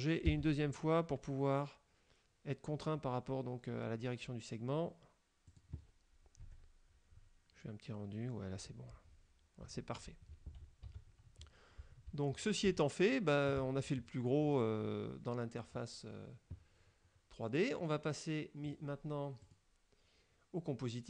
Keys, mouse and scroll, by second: 0.3 g, 5.6 click, 6.5 F12, 9.7 Escape, 10.0-11.8 scroll down 5, 10.9 Tab, 12.2 shift+scroll down 1, 12.7-13.7 shift+middle drag, 18.8 click, 19.6 click.